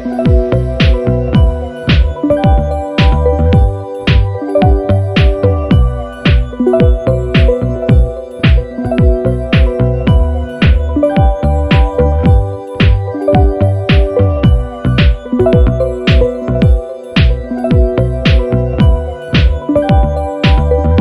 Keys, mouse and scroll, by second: 0.3 click, 2.1 click, 3.0 click, 4.5 click, 5.0 click, 5.5 ctrl+scroll down 2, 6.3 KP_5, 9.0 click, 9.7 click, 11.1 ctrl+s, 11.5-11.8 ctrl+scroll up 2, 12.2 ctrl+click, 13.1 click, 13.7 click, 15.4 click, 16.0 click, 17.0 Down, 19.3 click, 20.4 ctrl+z, 20.8-21.0 ctrl+scroll up 4.